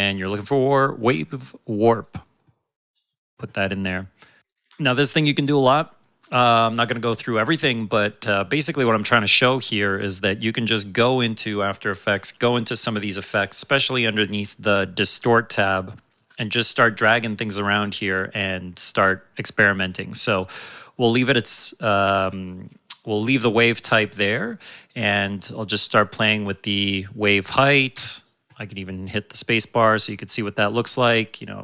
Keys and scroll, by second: 27.9 space.